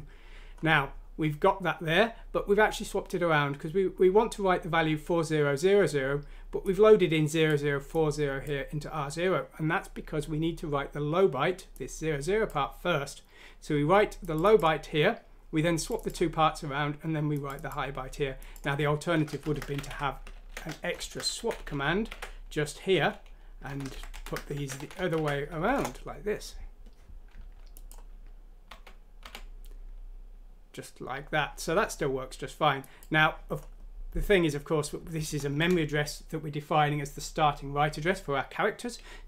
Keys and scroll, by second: 19.4 Home, 19.8 ctrl+v, 20.3 ctrl+z, 21.1 ctrl+Home, 21.4 ctrl+c, 22.2 ctrl+v, 22.9 Up, 23.1 Up, 23.6 Right, 24.1 Left, 24.7 ctrl+x, 24.7 Right, 24.9 Right, 25.1 ctrl+v, 25.6 F6, 25.8 Return, 28.6-29.2 typing, 35.5 Left.